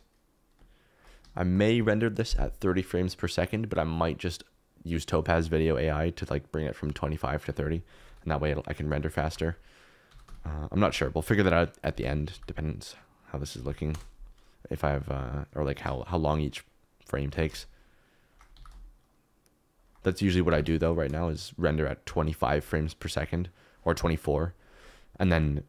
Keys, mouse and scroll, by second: 8.0 KP_7, 8.9 shift+right click, 9.7 alt+d, 10.0 r, 10.2 z, 10.8 9, 11.0 0, 12.3 g, 14.2 KP_0, 17.3 g, 17.5 shift+z, 18.5 g, 19.8 shift+right click, 20.4 g, 20.7 shift+z.